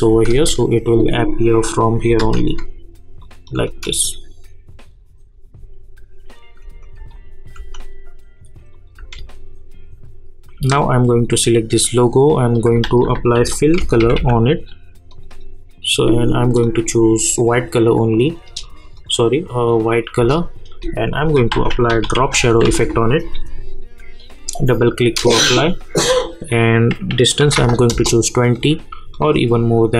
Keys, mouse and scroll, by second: 0.3 space, 2.2 space, 3.2 click, 3.5 space, 6.6 space, 8.7 click, 9.0 space, 12.5 click, 12.8 ctrl+a, 13.1-14.6 typing, 15.1 click, 20.2 Return, 21.1 click, 21.5 ctrl+a, 21.6-23.1 typing, 24.2 click, 27.9 Return, 29.1-29.9 drag.